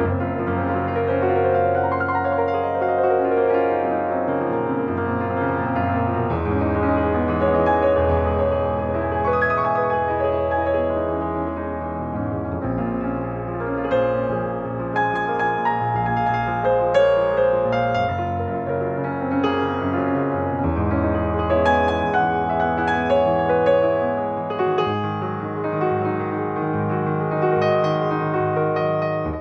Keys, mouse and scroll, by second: 1.4 click, 12.7 click, 17.3 click, 23.7 ctrl+2, 26.2 ctrl+click.